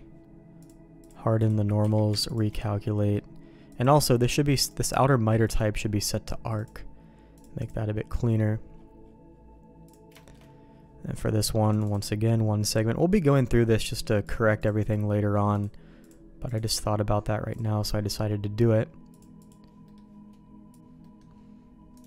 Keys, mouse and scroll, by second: 0.6 click, 1.0 click, 1.8 q, 3.0 middle click, 3.7 click, 4.6 click, 6.5-7.7 drag, 9.9 click, 10.2 shift+middle click, 11.7-13.3 drag, 13.8 click, 14.2 click, 15.6 click, 16.4 click, 17.5-18.8 drag, 19.1 click, 19.9 middle click, 21.0 middle click, 21.9 click.